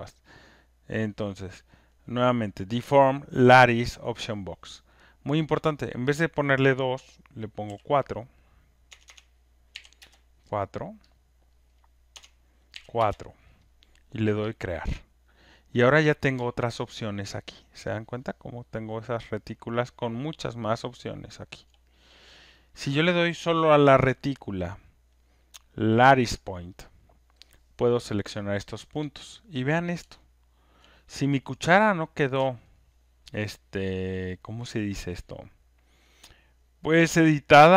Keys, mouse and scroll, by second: 5.8 click, 7.7 4, 8.9 BackSpace, 9.1 BackSpace, 9.7 4, 10.0 Return, 11.1 click, 12.1 BackSpace, 12.8 4, 13.0 Return, 14.6 click, 15.5 BackSpace, 17.1 alt+middle click, 17.9 Return, 19.6 alt+right click, 20.5 alt+click, 26.7 right click, 28.0 click, 30.8 alt+middle click, 31.9 middle click, 37.6-37.7 alt+drag.